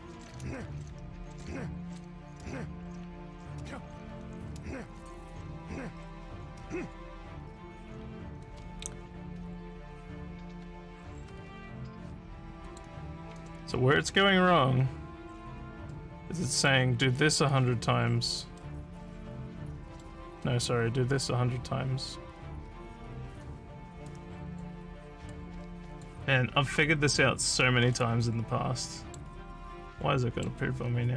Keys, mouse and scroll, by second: 0.2 space, 1.1 space, 2.2 space, 3.4 space, 4.4 space, 5.3 space, 6.4 space, 8.6 w, 9.3 w, 12.6 click, 15.9 middle click, 18.6-19.8 middle drag, 20.4 middle click, 24.0 click, 25.3 click, 27.4 click, 27.8-28.2 scroll down 3, 28.8 middle click, 30.0 middle click, 30.3-30.8 scroll.